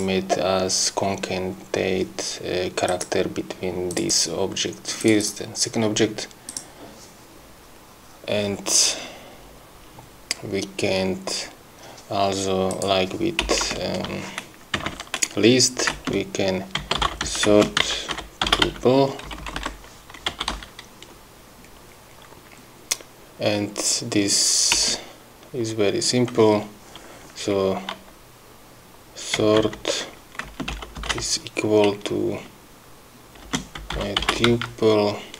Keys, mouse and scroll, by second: 2.9 click, 3.9 click, 5.1 click, 6.6 click, 12.8 click, 13.5 Return, 16.0-19.4 typing, 20.4 u, 20.6 End, 24.8 Return, 29.2-31.1 typing, 33.5-35.1 typing.